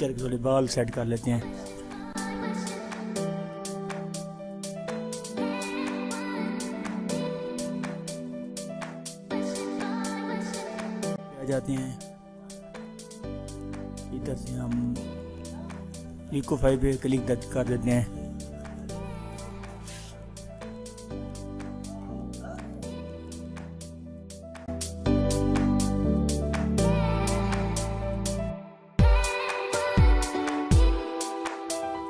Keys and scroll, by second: 8.7 ctrl+j.